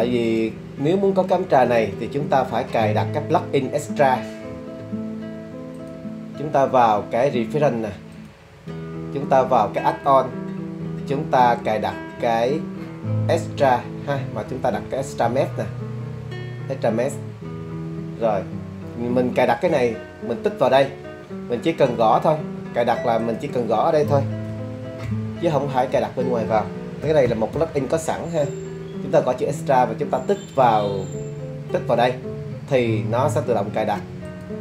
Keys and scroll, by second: 25.0 e, 25.9 x, 27.0 t, 27.2 r, 27.5 a.